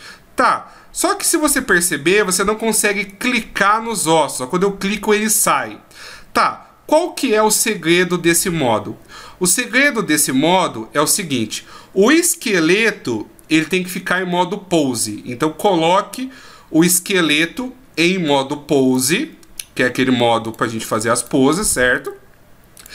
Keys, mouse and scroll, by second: 3.1 right click, 17.3 click, 19.1 click, 20.5 right click, 21.2 right click, 22.0 right click, 22.7 right click.